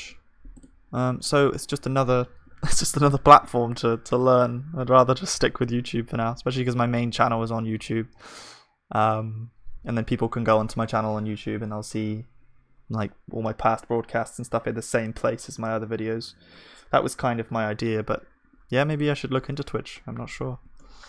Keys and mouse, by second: 1.3-2.6 drag, 1.3-21.0 middle drag, 1.3-2.6 right drag, 20.8 click.